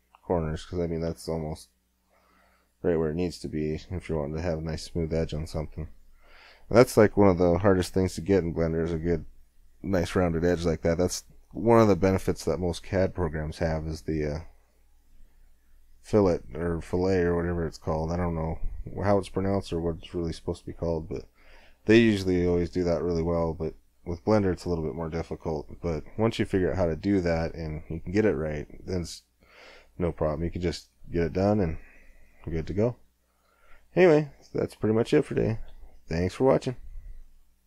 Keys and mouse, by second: 4.4-5.6 middle drag, 5.6 Tab, 31.7-36.9 middle drag.